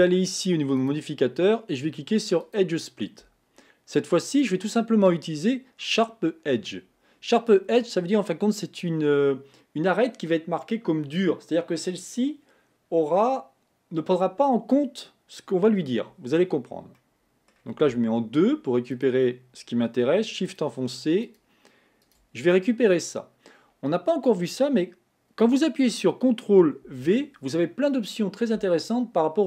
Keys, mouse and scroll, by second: 0.8-3.9 drag, 4.4 click, 17.1 middle click, 18.0 2, 19.0 click, 20.6 shift+click, 21.3 shift+click, 22.1 shift+click, 26.9 ctrl+v.